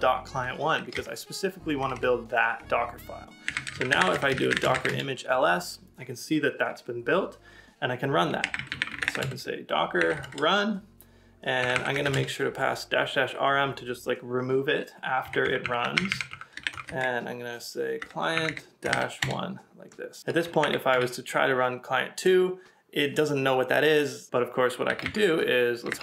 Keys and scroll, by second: 1.8 BackSpace, 3.2-4.0 typing, 8.2-12.1 typing, 17.7-18.5 typing, 20.2 Up.